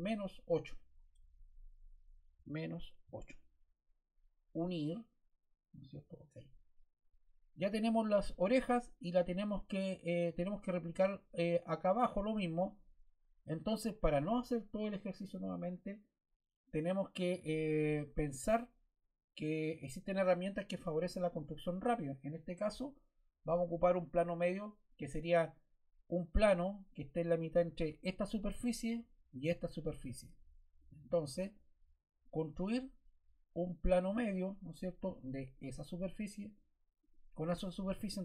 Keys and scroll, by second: 3.0 8.